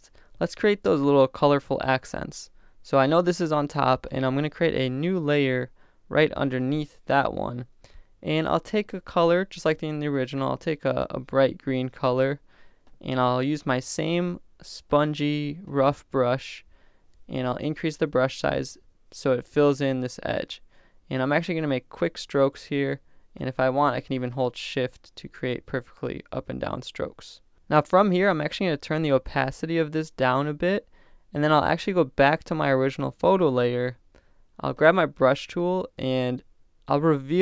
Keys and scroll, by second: 7.1 Return, 17.6 ].